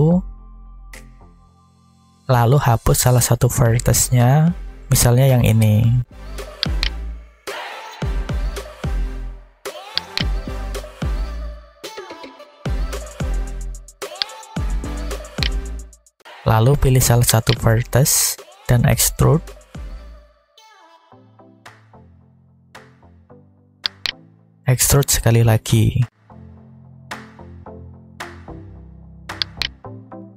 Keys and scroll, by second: 0.5 Tab, 4.2 alt+a, 7.8 x, 10.7 a, 12.4 alt+a, 19.7 e, 21.6 z, 26.3 e, 27.6 x, 29.9 a.